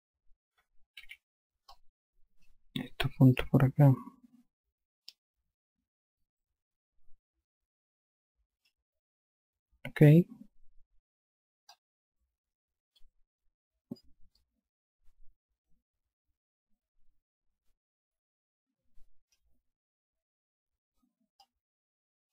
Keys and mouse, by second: 1.5 5, 2.2 click, 3.8 click, 12.2 click, 14.8 click, 21.9 click.